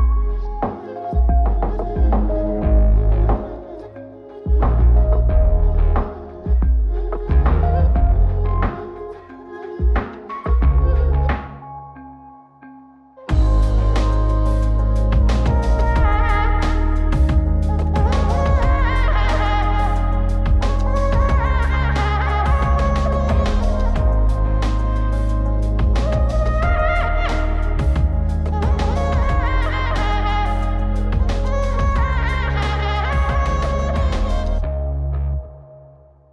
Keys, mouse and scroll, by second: 0.9 ctrl+shift+click, 2.2 ctrl+shift+click, 4.1 scroll down 2, 4.3 middle click, 5.0 ctrl+shift+click, 5.8 scroll up 2, 7.6-12.5 ctrl+shift+drag, 13.3 click, 14.6-15.6 drag, 17.3-20.0 drag, 20.5-20.9 scroll up 1, 20.9 click, 21.9-23.8 drag, 25.9-28.9 drag, 30.5 click, 31.8-32.6 drag, 34.1-36.3 drag.